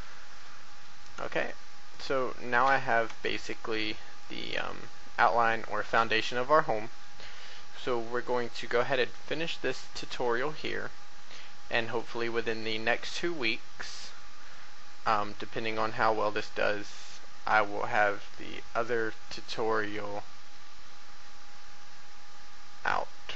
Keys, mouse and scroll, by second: 0.0 shift+middle click, 0.7-1.2 scroll down 1, 1.4 shift+middle click, 3.1 Tab, 3.7 middle click, 7.6 middle click, 12.4 shift+middle click, 13.8 middle click.